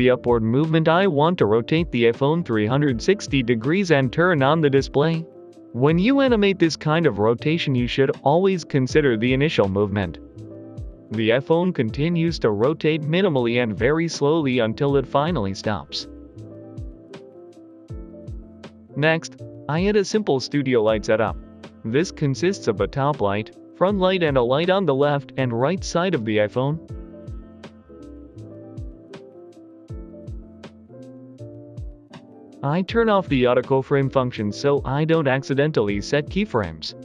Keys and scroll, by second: 0.4 typing, 0.8 Delete, 1.6 r, 1.7 z, 2.5 Escape, 2.9 r, 3.0 z, 3.5 Escape, 5.6 r, 5.7 z, 9.9 ctrl+z, 13.8 r, 13.9 z, 18.2 Escape, 18.9 Escape, 19.3 Escape, 20.0 Escape, 20.7 Escape, 21.0 Escape, 21.7 a, 22.9 typing, 23.7 Escape, 23.9 Delete, 24.2 typing, 25.5-28.0 typing, 27.1 Return, 29.3 Escape, 29.7 typing, 31.9 shift+d, 32.0 Return, 32.0 r, 32.2 Escape, 32.5 a, 33.7 a, 33.8 Delete, 35.8-37.0 typing.